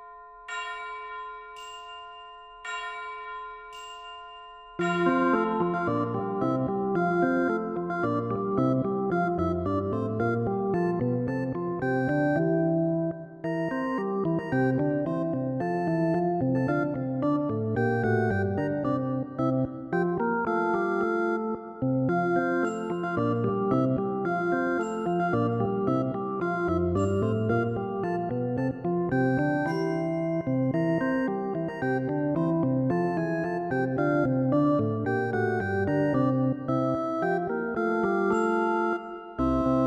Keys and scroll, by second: 0.4 ctrl+z, 30.4 ctrl+i.